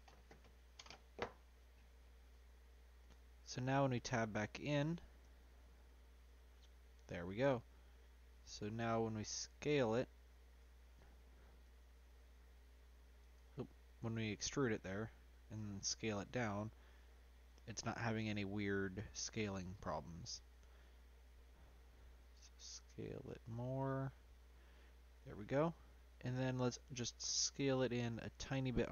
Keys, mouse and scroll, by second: 0.0-2.8 right drag, 2.8-4.1 middle drag, 5.2 Tab, 5.7 middle click, 6.3-6.8 scroll up 2, 6.8-7.9 scroll down 1, 8.4 a, 9.2 a, 10.3 ctrl+z, 10.6 ctrl+z, 11.6 s, 14.0 e, 17.9-19.1 middle drag, 19.1-19.4 scroll up 2, 19.4-22.2 middle drag, 22.2 s, 24.0-25.0 middle drag, 25.0-25.7 scroll down 1, 25.7-28.4 middle drag, 28.4 s.